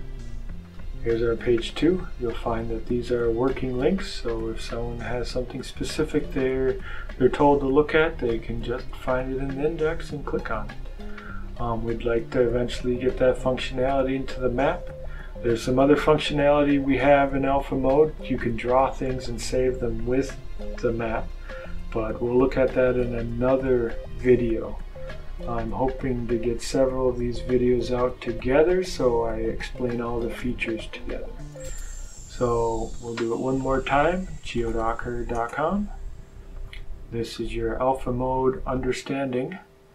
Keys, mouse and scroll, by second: 0.5 click, 3.0 click, 5.3-5.7 scroll up 1, 6.3 click, 9.4 click, 11.0 click, 22.2 click, 23.4 click, 25.5 click, 28.0 click, 32.8 click, 33.9-35.2 typing, 35.2 Return, 36.8-37.3 scroll down 2, 38.7 click.